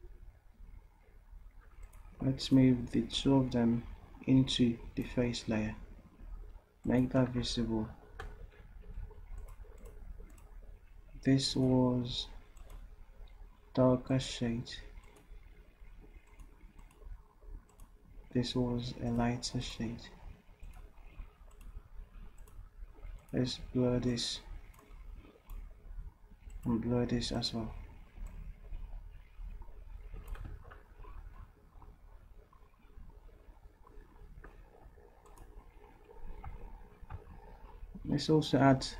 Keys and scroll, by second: 8.6 v, 35.0 v.